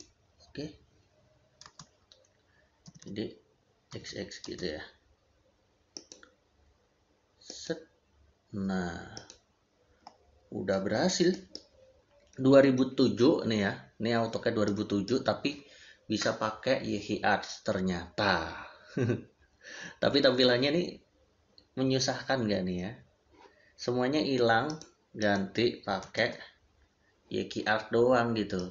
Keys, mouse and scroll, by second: 1.5 space, 2.7 d, 4.3 space, 5.8 click, 11.1 middle click, 14.5 middle click, 15.9 middle click, 24.5 middle click, 25.9 x, 26.0 space, 28.4 click.